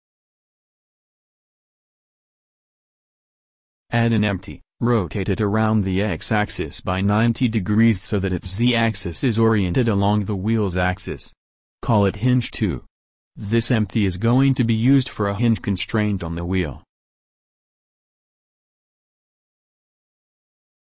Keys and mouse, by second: 5.0 shift+a, 9.0 s, 11.4-14.5 drag, 13.2 r, 16.5-20.9 drag.